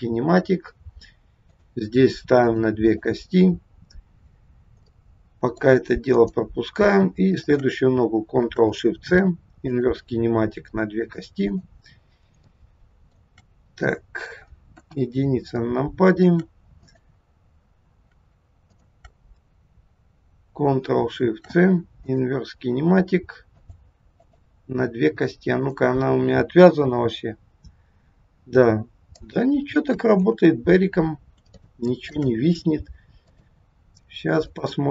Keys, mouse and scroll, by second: 1.5 click, 2.5 click, 2.9 click, 4.9 middle click, 6.2 click, 7.3 shift+click, 9.0 ctrl+shift+c, 10.9 click, 11.5 click, 12.4 shift+middle click, 13.9 middle click, 14.8 KP_1, 15.5 shift+middle click, 16.8 click, 18.7 shift+click, 21.1 ctrl+shift+c, 23.5 click, 24.1 click, 25.5 click, 26.9 g, 30.4 ctrl+z, 31.6 shift+middle click, 33.3 click, 34.4 shift+click.